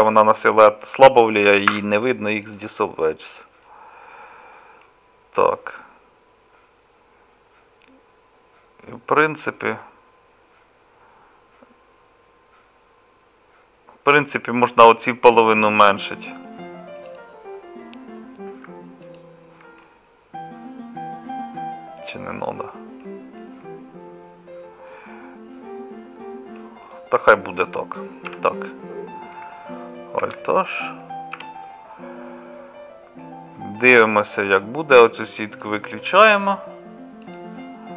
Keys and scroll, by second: 1.7 x, 27.2 Tab, 28.3 KP_Divide, 30.2 alt+h, 30.4 KP_Divide, 31.4 KP_Divide.